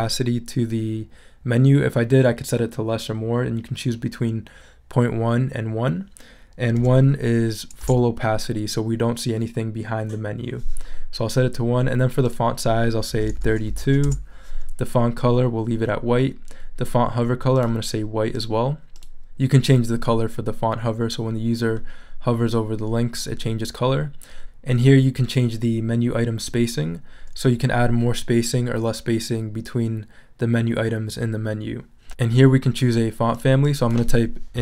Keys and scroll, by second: 6.8 |, 7.8 Return, 13.3 super+a, 13.7 super+3, 13.8 2, 14.0 Return, 34.3-34.6 typing.